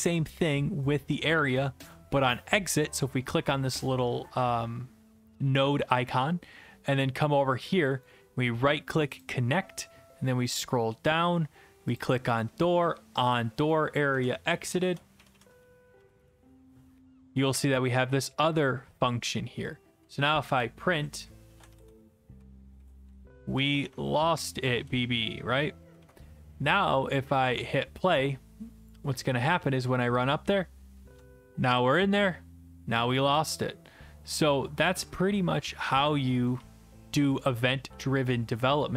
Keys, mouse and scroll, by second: 1.6 click, 8.0 right click, 10.2 click, 10.2-11.9 scroll, 12.0 click, 13.3 click, 14.5-16.5 typing, 19.7 click, 20.5 Return, 21.2-25.4 typing, 26.0 ctrl+s, 27.5 click, 28.5 click, 29.6 w, 30.1 w, 30.1 w, 30.1 w, 31.2-37.7 typing.